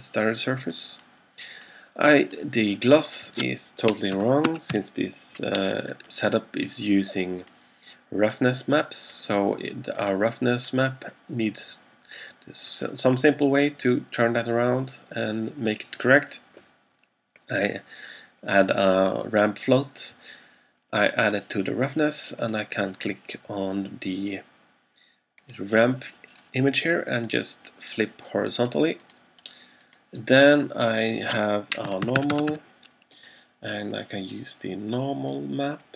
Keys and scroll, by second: 4.0-5.3 typing, 31.7-33.1 typing.